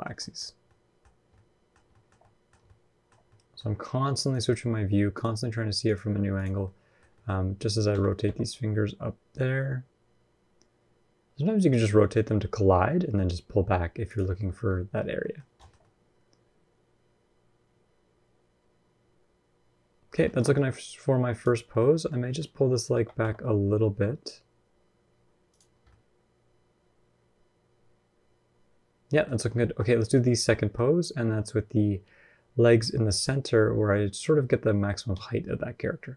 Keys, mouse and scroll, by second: 0.0 shift+middle click, 0.2-0.9 scroll up 3, 0.4 middle click, 1.1 middle click, 1.7 shift+middle click, 2.0 middle click, 2.4 shift+scroll down 1, 2.4 shift+middle click, 2.9 scroll up 1, 3.0 middle click, 4.1 click, 4.9 shift+click, 5.6 click, 6.4 middle click, 6.9 shift+middle click, 7.7 r, 14.1-14.8 scroll down 9, 14.5 middle click, 14.8-15.4 scroll up 5, 15.0 middle click, 15.4 shift+middle click, 15.6 middle click, 20.0 shift+middle click, 20.2 scroll up 1, 20.3 middle click, 21.1 click, 21.5 shift+middle click, 21.6 scroll up 1, 21.7 middle click, 22.0 middle click, 22.7 g, 25.5-26.5 scroll down 4, 25.6 middle click, 29.5 shift+middle click, 30.3 middle click.